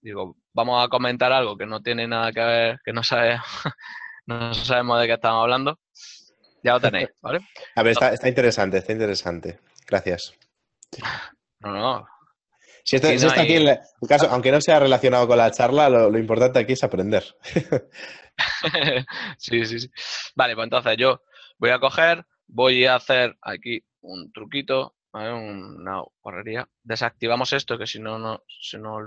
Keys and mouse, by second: 0.8 click, 6.7 Tab, 7.3 middle click, 19.2 ctrl+middle click.